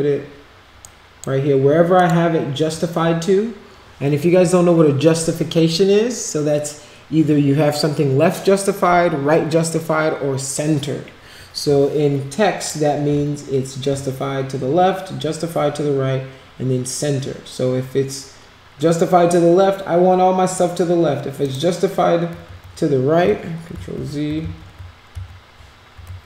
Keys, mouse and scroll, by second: 0.8 right click, 1.9 click, 12.6 click, 21.4 click, 23.8 ctrl+z, 24.4 ctrl+z, 25.1 ctrl+z, 26.0 ctrl+a.